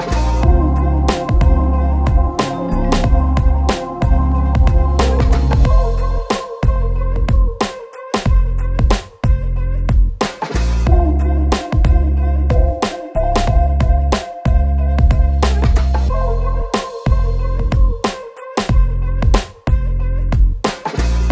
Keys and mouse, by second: 0.3-1.5 typing, 0.6 middle click, 1.3 shift+middle click, 2.1 ctrl+s, 2.1 ctrl+click, 3.0-9.0 typing, 5.7 shift+middle click, 6.5 shift+click, 6.6 Tab, 6.9 shift+click, 7.3 shift+click, 7.8 ctrl+z, 7.8 ctrl+click, 8.0 Tab, 8.6 shift+click, 10.1 Tab, 10.2 click, 10.3 g, 11.0 ctrl+click, 11.1 ctrl+r, 11.4 Tab, 11.5 s, 11.9 Tab, 12.1 Tab, 12.2 ctrl+a, 12.6-15.0 typing, 12.8 Tab, 12.8 ctrl+b, 13.4 Tab, 14.1 Tab, 15.5 click, 16.2 shift+middle click, 16.9 shift+middle click, 17.1 shift+d, 17.4 shift+middle click, 17.7 ctrl+KP_Subtract, 18.1 h, 18.9 KP_Divide, 19.0 KP_Divide, 19.2 shift+middle click, 19.4 q, 20.0 Tab, 20.2 shift+z, 20.9 Tab, 20.9 s.